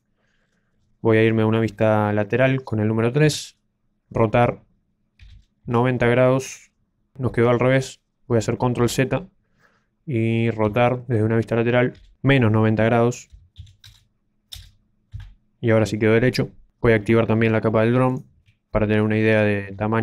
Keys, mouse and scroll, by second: 0.4-3.0 scroll down 10, 3.0 scroll down 1, 3.2 KP_3, 5.1 r, 6.9 KP_1, 8.9 ctrl+z, 10.6 KP_3, 11.9 r, 15.0 KP_1, 18.2 shift+click, 19.0 scroll down 1, 19.1-19.6 scroll up 1.